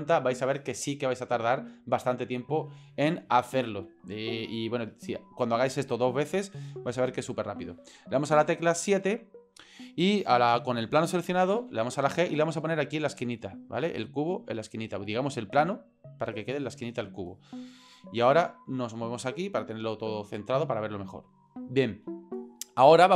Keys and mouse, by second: 8.3 KP_7, 11.6 g, 15.1 g, 18.4-20.4 shift+middle drag.